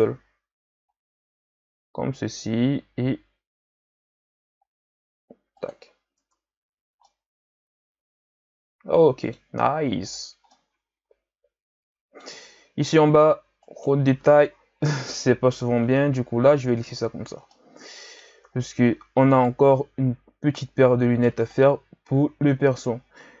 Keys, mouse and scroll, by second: 5.8 z, 6.2 Tab, 7.1-10.0 middle drag, 10.0-10.5 scroll up 5, 10.5-13.6 middle drag, 13.6 right click, 15.0 KP_3, 16.4 a, 17.0-17.5 scroll down 4, 17.5-18.6 middle drag, 18.6 ctrl+scroll down 4, 18.8-19.3 scroll up 3, 19.3 right click, 21.4-23.4 drag.